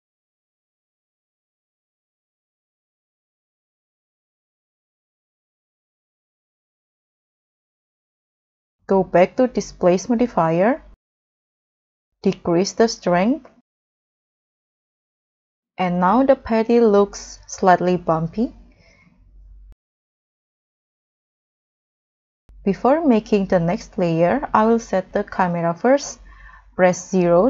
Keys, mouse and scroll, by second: 4.8 scroll down 1, 8.4 scroll down 1, 11.0-12.8 scroll down 3, 16.0 scroll down 1, 16.0 middle click, 19.7-20.7 scroll down 3, 23.6 scroll down 2, 24.5 scroll down 2, 26.6 0.